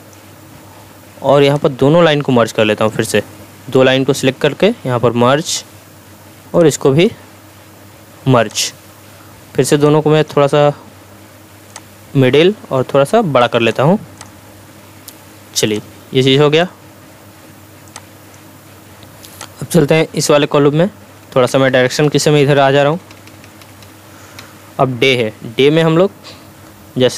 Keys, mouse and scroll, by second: 20.4 Left, 25.8 click.